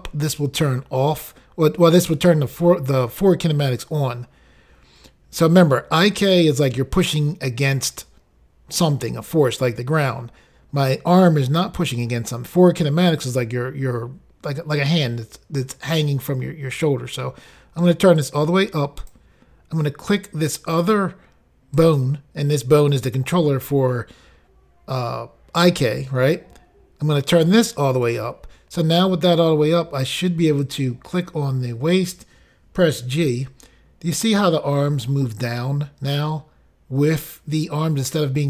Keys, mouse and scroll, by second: 18.2 click, 20.8 click, 20.9 click, 21.8 click, 27.3 click, 30.7 click, 30.9 click.